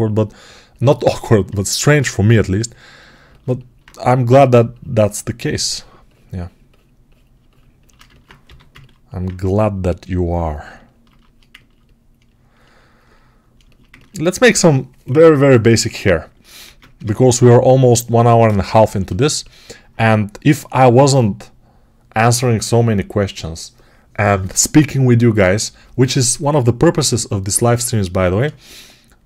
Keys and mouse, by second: 3.1-7.2 alt+shift+drag, 7.2-29.2 shift+right drag, 8.3 g, 16.5 ctrl+Tab, 16.9 shift+a, 18.3 Tab.